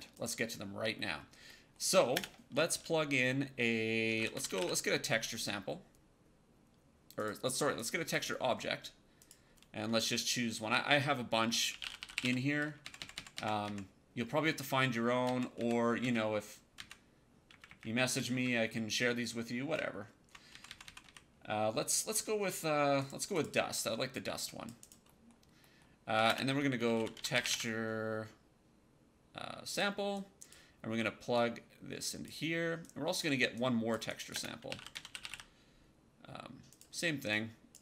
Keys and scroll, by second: 2.0 space, 3.7-5.0 typing, 11.3-12.6 typing, 12.7 Down, 15.9 Up, 16.7 Down, 17.4 Up, 19.6 Down, 26.1-27.9 typing, 34.2-35.7 typing.